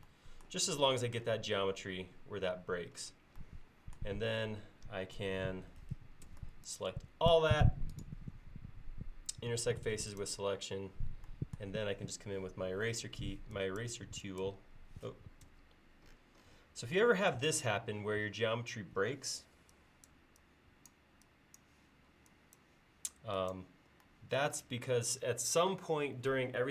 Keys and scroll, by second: 6.3 space, 13.2 e, 15.5 space, 19.5 e.